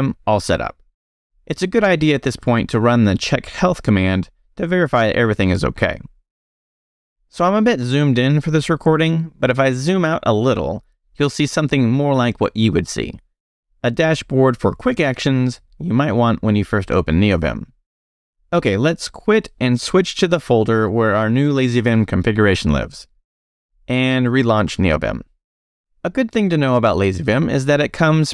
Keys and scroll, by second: 0.0 q, 2.2-4.4 typing, 6.2 Escape, 6.4 shift+;, 7.1 shift+q, 7.3 Return, 9.7 super+-, 16.1 super+0, 18.3 Escape, 18.4-19.4 typing.